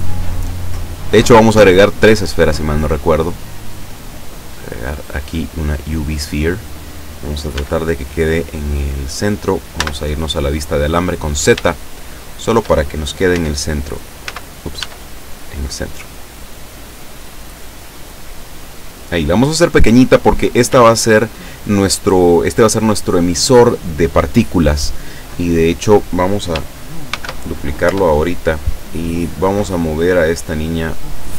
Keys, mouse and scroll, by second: 5.9-7.2 drag, 7.6 s, 9.2 click, 9.8 z, 11.1-11.4 scroll up 2, 11.7 shift+middle click, 13.3 z, 14.2 z, 14.8 s, 19.7 click, 20.7 s, 21.4 click, 22.0 scroll down 1, 27.1 shift+d, 27.9 Return, 28.8 scroll down 1, 29.7-31.3 drag.